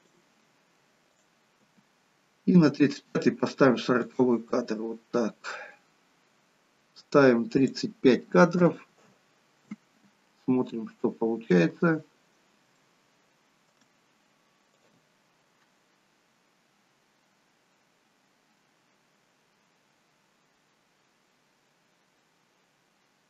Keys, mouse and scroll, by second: 1.2 click, 1.7 g, 7.6 click, 11.1-12.7 scroll down 2, 12.7 scroll down 1, 12.8 shift+middle click, 14.8 click.